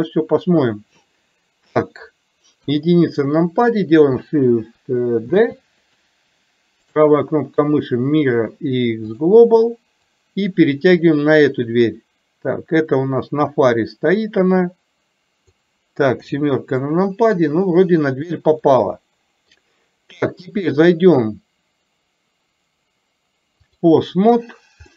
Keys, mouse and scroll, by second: 2.7 KP_1, 5.3 shift+d, 10.1-15.6 drag, 16.3 KP_7, 18.7 middle click, 20.6-23.9 drag.